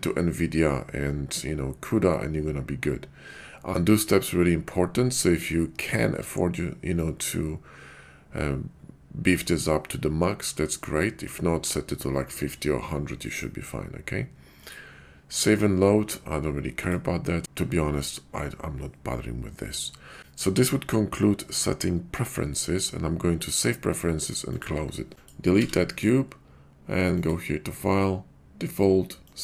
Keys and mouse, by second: 25.1 click, 25.6 x, 27.1-29.4 drag.